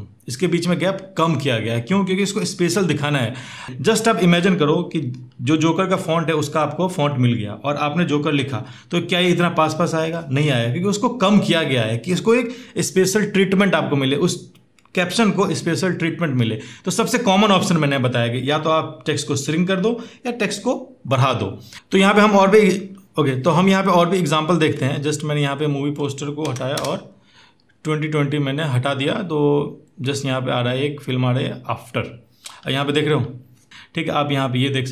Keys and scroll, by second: 26.6 Return, 26.6 BackSpace.